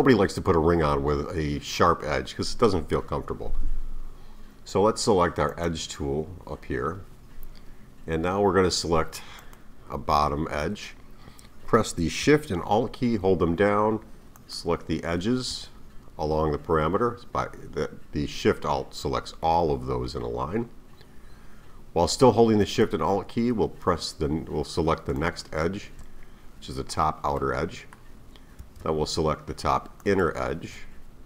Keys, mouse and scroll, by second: 5.5 click, 9.4 click, 14.4 alt+shift+click, 25.2 alt+shift+click, 27.3-30.0 middle drag, 30.0 alt+shift+click.